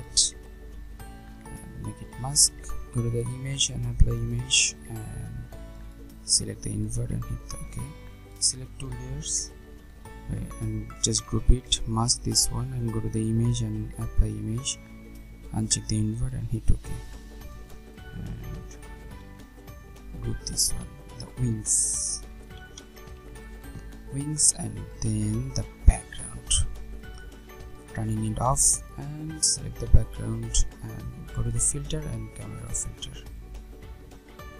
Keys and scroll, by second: 9.4 ctrl+g, 18.9 ctrl+g, 25.0 Return.